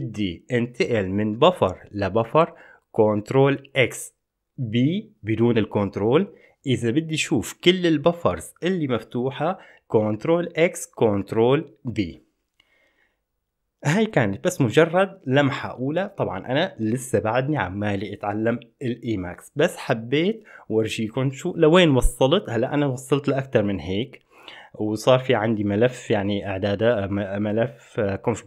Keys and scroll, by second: 2.6 ctrl+x, 2.6 b, 10.2 ctrl+b, 10.2 x.